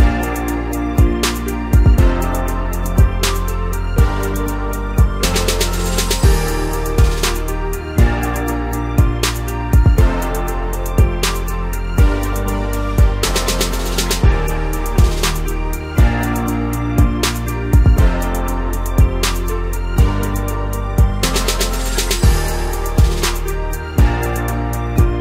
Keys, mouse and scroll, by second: 0.7 scroll down 2, 0.9-2.5 middle drag, 2.5-3.3 scroll up 5, 3.3 Tab, 3.7-5.6 middle drag, 5.6 3, 5.9-6.6 scroll up 1, 6.6 click, 7.3-8.1 middle drag, 8.1-9.1 scroll up 1, 9.1 ctrl+KP_Add, 10.3 g, 12.8 Tab, 13.1-13.6 scroll down 5, 13.6-14.8 middle drag, 14.8-15.6 scroll up 4, 15.6 g, 17.6 Tab, 18.1-19.5 middle drag, 19.5-21.2 scroll up 1, 21.2-22.8 middle drag, 22.8 2, 23.6 click, 25.0 shift+d.